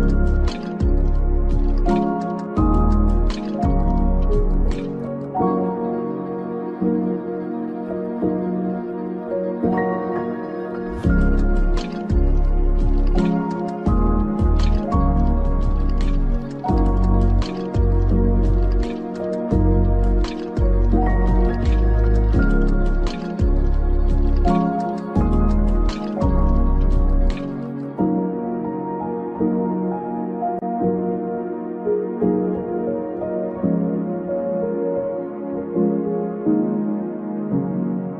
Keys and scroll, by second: 2.9 ctrl+v, 14.9 Up, 26.1 ctrl+v.